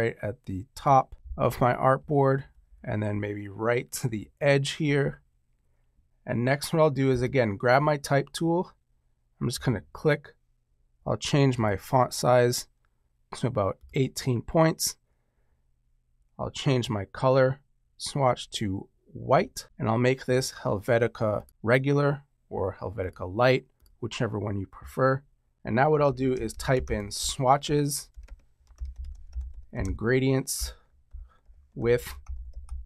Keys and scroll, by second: 2.3 shift+Right, 25.8-32.8 typing, 30.5 Return.